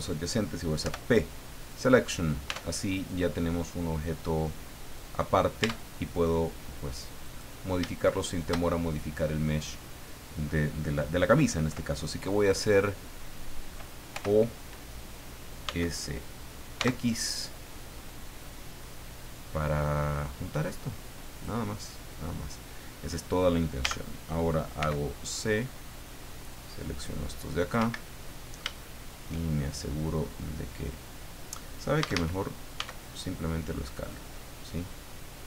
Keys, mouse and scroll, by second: 0.8 p, 1.6 click, 2.5 Tab, 2.9 right click, 4.2-5.3 drag, 5.6 Tab, 7.2 right click, 8.2 shift+right click, 14.1 o, 15.6 s, 16.7 x, 21.3 click, 23.8 a, 24.8 c, 25.3-27.9 drag, 27.8 Escape, 28.1-29.4 middle drag, 32.0 a, 34.0 click, 34.3-35.4 middle drag.